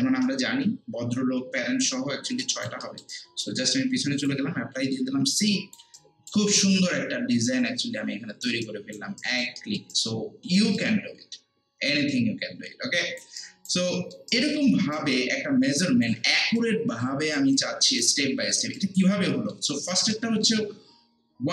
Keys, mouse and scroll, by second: 0.0 Return, 0.9 scroll down 1, 2.4 alt+right click, 2.8 alt+middle click, 3.1 alt+right click, 4.2 click, 4.8 scroll down 1, 5.2 scroll up 1, 5.4 alt+click, 6.0 alt+right click, 6.5-8.6 alt+drag, 8.6 alt+right click, 9.6 alt+middle click, 9.9 alt+right click, 10.8 alt+click, 13.4 alt+right click, 13.9 alt+middle click, 14.3 alt+right click, 15.1 alt+click, 16.6 alt+right click, 17.5 alt+click, 18.8 alt+right click, 19.3 alt+middle click, 19.7 alt+right click, 20.1 alt+middle click.